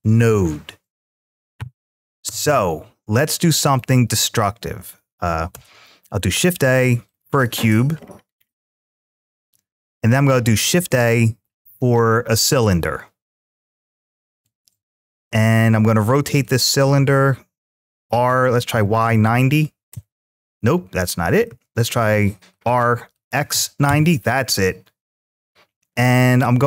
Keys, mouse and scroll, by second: 3.5-4.7 drag, 5.4 shift+a, 7.8-8.7 scroll down 6, 10.5 shift+a, 17.9 r, 19.8 Return, 21.3 ctrl+z, 23.7 Return.